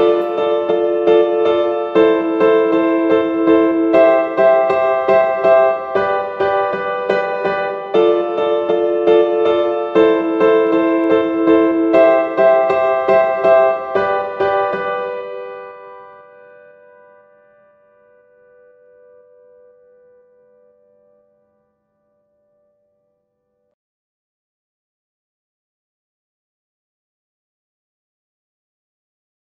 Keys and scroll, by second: 2.1 v, 6.3 v, 10.0 super+x, 13.2 super+x, 17.3 z, 18.9 v, 19.3 super+s.